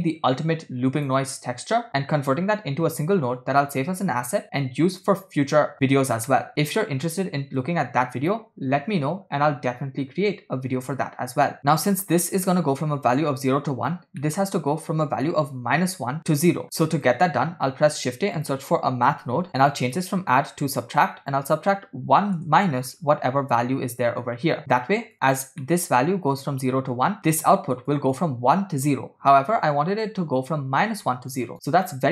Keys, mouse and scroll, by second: 1.1 click, 6.4 middle click, 6.6-7.6 scroll up 2, 7.7-8.4 drag, 10.9 scroll up 4, 11.7 middle click, 14.3 middle click, 14.6-16.6 scroll up 2, 16.8 click, 16.8 middle click, 16.8 scroll down 2, 17.5 shift+a, 19.9-21.1 drag, 21.5 click, 24.1-24.6 drag, 25.2 click, 25.7 middle click, 27.2 middle click, 27.9-31.5 drag.